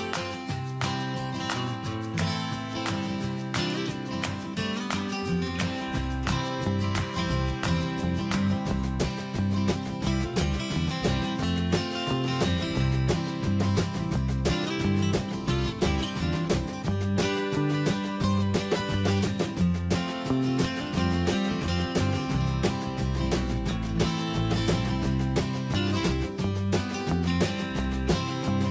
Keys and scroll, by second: 16.7 ctrl+Return, 19.3 ctrl+a, 20.6 BackSpace, 23.6 ctrl+a, 26.7 BackSpace.